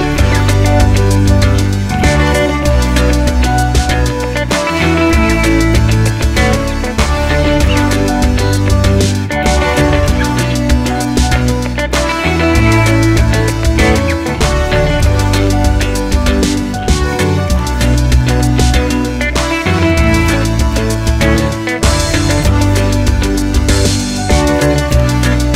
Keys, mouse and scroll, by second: 2.2 click, 5.7 Delete, 7.4 ctrl+click, 8.6-9.7 scroll down 1, 10.4 ctrl+alt+click, 11.6 scroll up 1, 12.8 click, 16.8-17.2 scroll down 1, 18.2-24.1 drag.